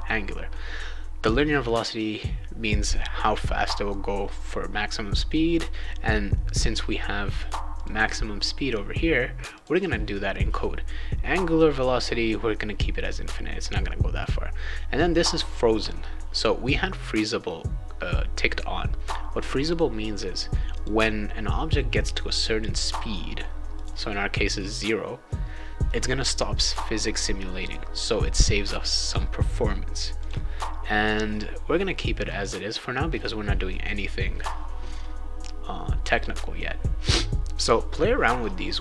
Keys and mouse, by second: 7.7 click, 9.5 click, 20.7 click, 23.7 click, 30.2 click, 32.4 click.